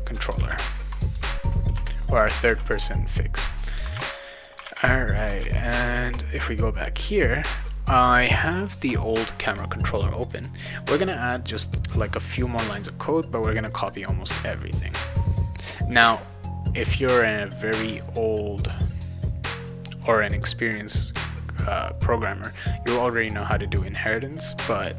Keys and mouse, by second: 0.0-0.9 typing, 1.7 Return, 2.4 ctrl+s, 3.9 alt+Tab, 4.6 alt+Tab, 5.4 alt+Tab, 5.6 alt+Tab, 5.9 alt+Tab, 10.3 click, 10.4 click, 11.5 click, 13.7-14.7 drag.